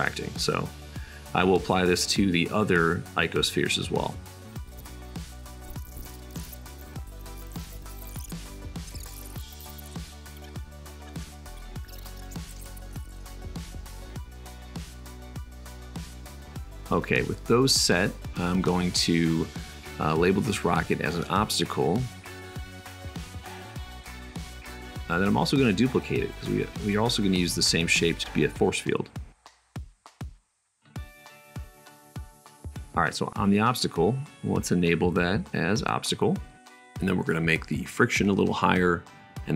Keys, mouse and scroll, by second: 4.9-6.6 middle drag, 6.6 super+click, 6.7 super+z, 6.8 super+z, 7.1 middle click, 9.6 click, 10.7 click, 12.2 click, 12.7 super+click, 12.9 super+s, 20.5-22.3 drag, 22.5-25.4 middle drag, 25.6 shift+d, 26.1 middle click, 26.1-27.3 drag, 27.3 middle click, 27.5-29.1 drag, 29.1-32.4 middle drag, 32.4-33.3 drag, 33.3-34.5 middle drag, 34.5-35.3 drag, 35.3-39.5 middle drag.